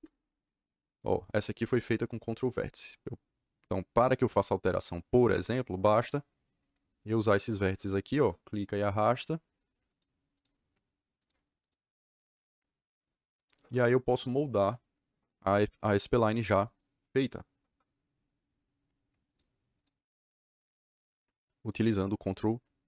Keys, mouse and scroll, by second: 0.9 click, 6.5 click, 7.1 click, 9.8 click, 10.3 click, 11.1 click, 11.6 click, 13.3 click, 14.1 click, 15.9 click, 16.6 click, 19.2 click, 19.7 click, 21.6 click, 22.2 click.